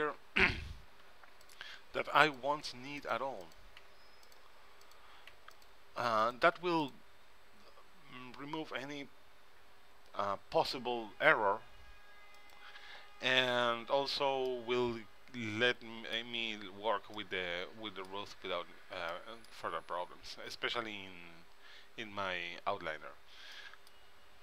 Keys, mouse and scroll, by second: 1.2 click, 1.2 x, 2.4 right click, 2.8 x, 4.0 x, 5.5 x, 6.7 x, 13.1-14.4 drag, 14.6-16.3 middle drag, 16.3 middle click, 16.7 middle click, 16.8-19.0 middle drag, 19.3-21.0 middle drag, 23.7-24.4 middle drag.